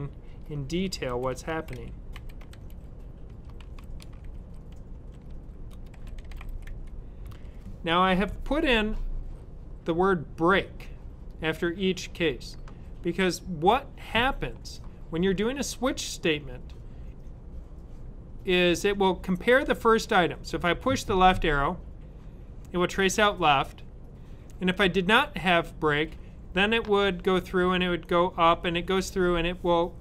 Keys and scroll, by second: 1.0-7.1 typing.